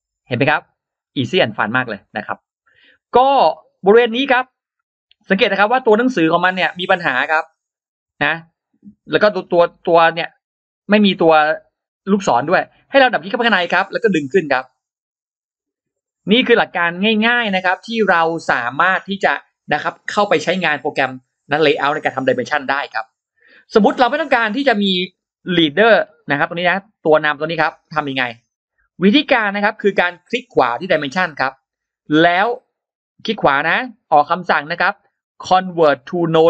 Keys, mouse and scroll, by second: 0.4 click, 0.8-1.4 scroll down 2, 1.9-2.2 scroll down 2, 3.5-3.8 scroll up 2, 4.3 click, 5.8-6.1 scroll up 2, 12.9 click, 13.1 click, 13.8-15.5 drag, 15.9 click, 16.3 scroll down 1, 16.8-17.2 scroll down 1, 24.4-24.7 scroll up 1, 25.8-27.2 drag, 27.2 shift+x, 27.5 shift+click, 28.2 shift+x, 28.4 shift+right click, 28.6 shift+right click, 29.3-29.7 scroll up 2, 29.3 shift+x, 30.7 right click.